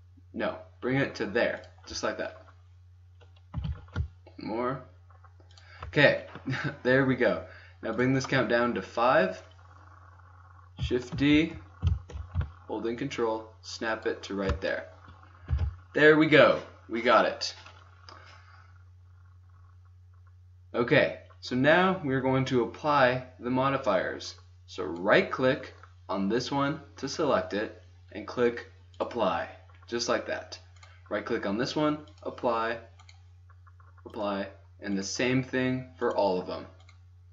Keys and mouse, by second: 1.7-2.2 drag, 3.5 g, 7.8-10.2 drag, 11.9 shift+d, 15.2 click, 15.5 a, 24.9-26.8 drag, 28.9-29.5 drag, 29.5-30.5 middle drag, 30.7-32.0 drag, 32.7-33.2 drag, 33.8-34.2 drag, 34.8 right click, 36.0 middle click.